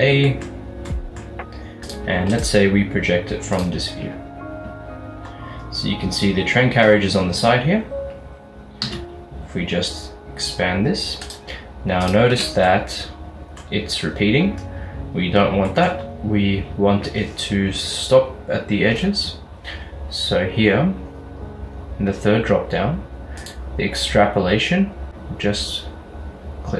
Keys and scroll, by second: 9.0 s, 12.4 Tab.